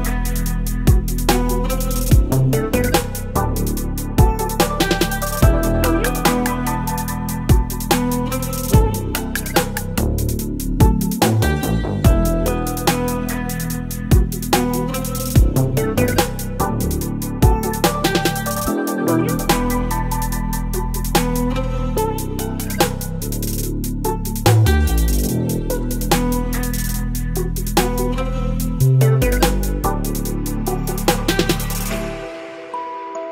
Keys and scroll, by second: 0.2 ctrl+BackSpace, 1.3 ctrl+BackSpace, 3.5 ctrl+BackSpace, 6.7 ctrl+BackSpace, 11.6 Delete, 13.7 space, 16.0 space, 17.1 ctrl+BackSpace, 18.8 ctrl+e, 19.1 ctrl+t, 21.4 Return, 22.2 Right, 22.2 Right, 23.7 space.